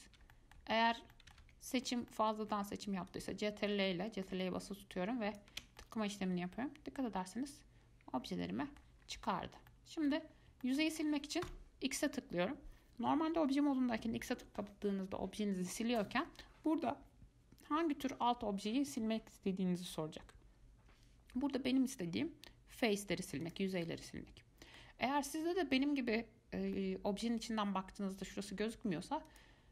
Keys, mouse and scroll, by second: 0.5 middle click, 1.0 ctrl+z, 1.3 middle click, 1.6 ctrl+z, 2.2 scroll down 1, 2.3-3.3 middle drag, 3.3 ctrl+click, 6.0-9.0 middle drag, 9.2-9.8 scroll up 2, 9.8 scroll down 1, 9.9-10.6 middle drag, 10.6 scroll up 1, 10.8-11.7 shift+middle drag, 11.7 x, 24.0-29.5 middle drag, 29.5-29.7 drag.